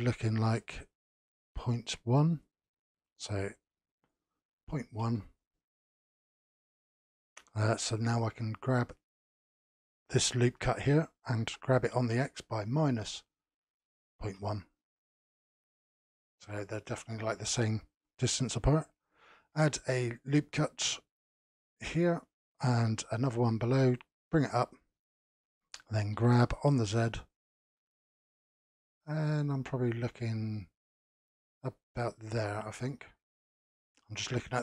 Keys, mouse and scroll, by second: 2.3-5.3 drag, 9.0 alt+click, 11.4 g, 19.6 ctrl+r, 23.2 ctrl+r, 26.1 g, 32.7 scroll up 3, 33.3-34.6 middle drag.